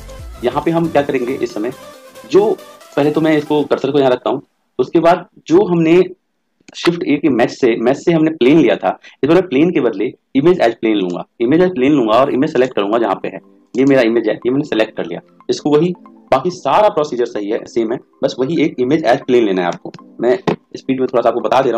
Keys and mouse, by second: 2.8 click, 6.5 shift+a, 13.8 click, 19.6 r.